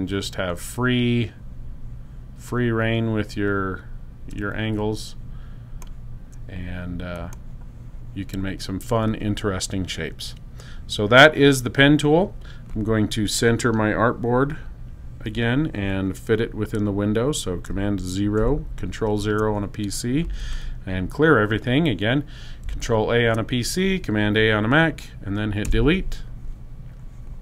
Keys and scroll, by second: 18.1 super+0, 23.0 super+a, 25.5 BackSpace.